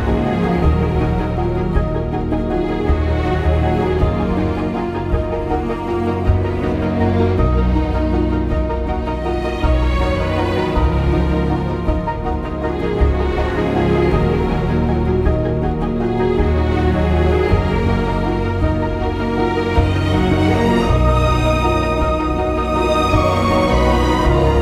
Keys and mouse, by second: 3.4 ctrl+b, 6.2 ctrl+b, 7.7 click, 9.2 g, 9.3 g, 10.1 drag, 10.9 click, 11.7 ctrl+b, 13.7 click, 14.4 ctrl+b, 17.7 ctrl+b, 19.5 ctrl+b, 21.5 ctrl+b, 22.2 click, 24.3 g, 24.4 g.